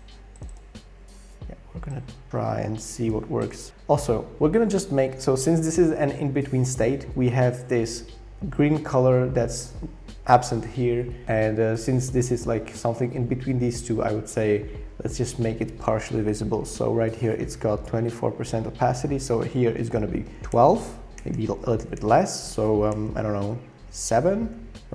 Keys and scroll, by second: 20.3 shift+Up, 20.4 shift+Up, 20.5 shift+Up, 21.1 shift+Down, 21.3 shift+Down, 21.5 shift+Down, 21.6 Page_Down, 21.8 Page_Down, 21.9 Page_Down, 22.3 shift+Down, 22.5 Page_Down, 22.9 Page_Up, 23.0 Page_Up, 23.5 Up, 24.5 Down, 24.7 Up.